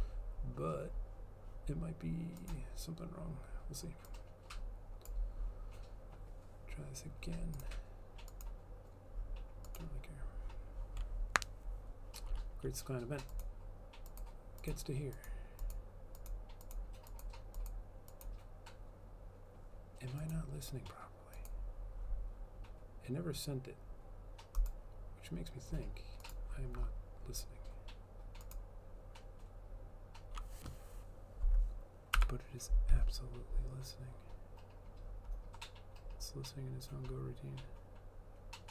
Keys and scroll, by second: 32.2 F12.